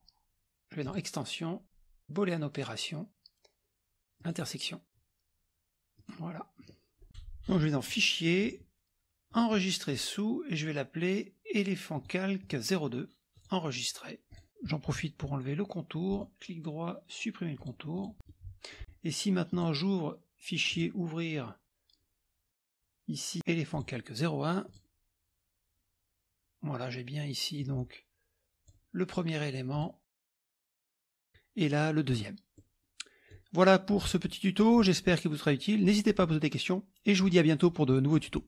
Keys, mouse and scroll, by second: 0.8 click, 4.2 click, 6.0 click, 7.9 click, 9.3 click, 12.0 click, 13.4 click, 14.4 click, 16.2 right click, 17.6 click, 18.3 middle click, 18.4-18.9 scroll up 1, 19.5 click, 20.7 click, 23.7 click, 24.7 click, 27.6-28.8 drag, 29.8 click, 31.0 click, 32.6 middle click, 32.6 scroll down 1, 32.8 scroll up 1, 32.9 scroll down 1, 33.0 middle click.